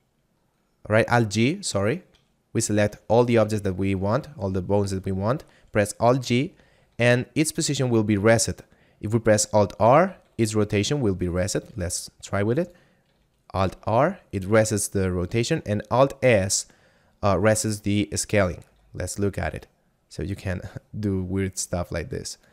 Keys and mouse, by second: 1.7 right click, 2.7 shift+right click, 3.3 a, 6.2 alt+g, 9.7 alt+r, 11.4 right click, 11.8 r, 12.6 click, 13.7 alt+r, 18.4 right click, 18.8 s, 22.3 click.